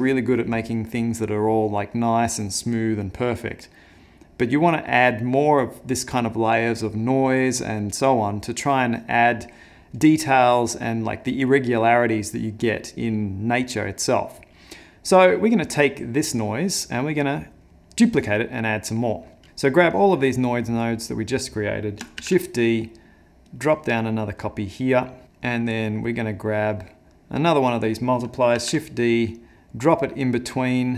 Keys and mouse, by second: 19.4 click, 19.9 click, 22.2 shift+d, 23.8 middle click, 24.4 click, 25.1 middle click, 25.8 middle click, 27.6 click, 28.6 shift+d.